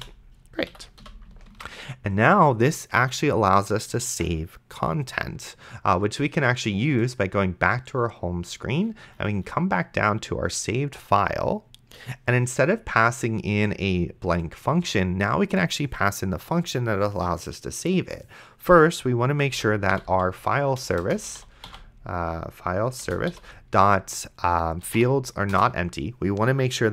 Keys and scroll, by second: 0.0-1.0 typing, 0.7 End, 1.8 ctrl+s, 19.5-23.3 typing, 23.0 Return, 24.6-25.5 typing, 25.5 Return.